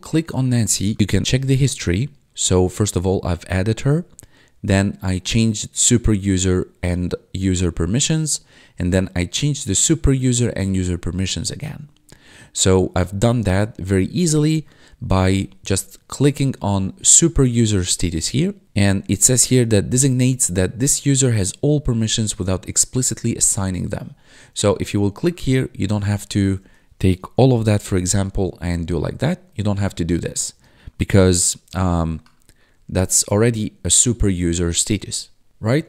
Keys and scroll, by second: 11.3 1, 16.7 1, 19.1 1, 24.2 1, 27.4 ctrl+a, 30.9 ctrl+a.